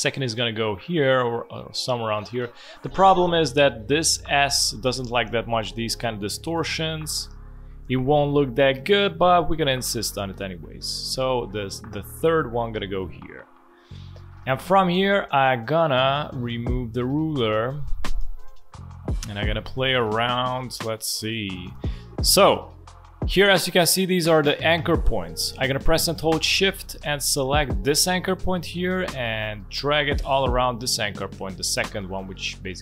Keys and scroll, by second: 18.2 space, 20.5 space.